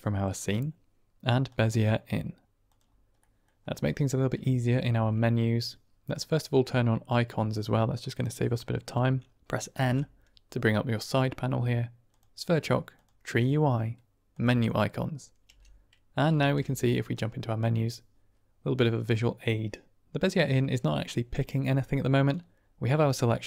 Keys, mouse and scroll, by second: 3.1 click, 4.8 shift+a, 9.7 n, 12.0 click, 12.8 click, 14.2 click, 15.4 n, 16.3 shift+a, 21.3 click.